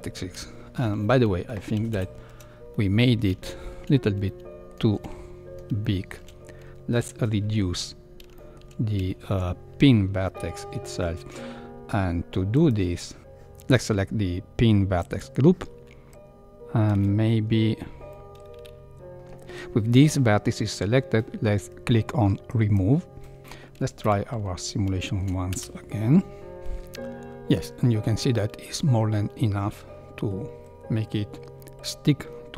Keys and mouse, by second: 0.5 space, 1.9 shift+Left, 2.7-3.0 middle drag, 3.4 shift+middle click, 4.3 middle click, 5.0 Tab, 5.8 shift+middle click, 8.3 shift+middle click, 9.2 shift+middle click, 15.0 click, 18.0 middle click, 22.6 click, 23.4 Tab, 24.0 shift+KP_1, 25.0 shift+middle click, 25.5 space.